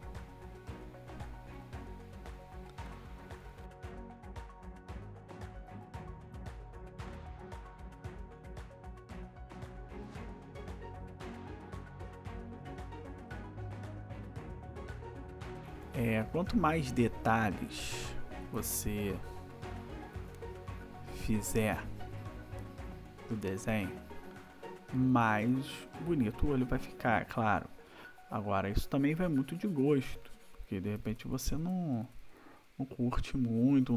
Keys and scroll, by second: 3.9 ctrl+=, 4.3 space, 5.5-7.9 typing, 9.0 \, 9.8 \, 10.3 ], 10.9 ], 12.0 \, 13.3 ], 15.2 \, 18.5 \, 25.1 \, 30.9 \.